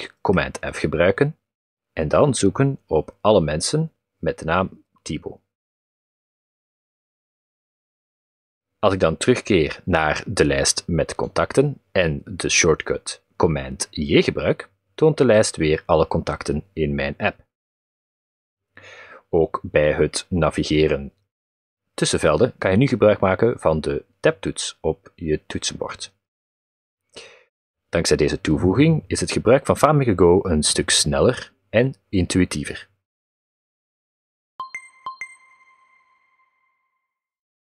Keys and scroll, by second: 13.0 super+j, 20.3 Tab, 24.0 Tab, 26.0 Tab.